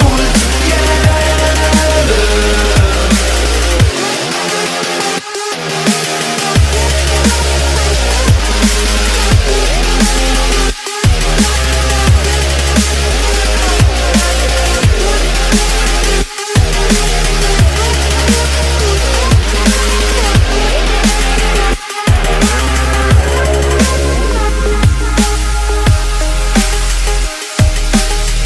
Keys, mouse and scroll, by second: 0.8 right click, 1.8 click, 3.0 right click, 3.4 click, 3.4 F10, 4.0 click, 8.7 click, 9.4 KP_1, 9.6 KP_0, 10.3 Return, 11.5 click, 12.1 right click, 12.7 click, 14.1 Delete, 14.3 click, 14.5 Delete, 15.4 click, 17.1-18.2 right drag, 18.3 click, 20.5 right click, 21.9 click, 22.4 right click, 23.0 Delete, 23.7 click, 23.8 Delete, 24.5 right click, 26.0-27.3 drag, 27.5 Delete, 27.9 right click.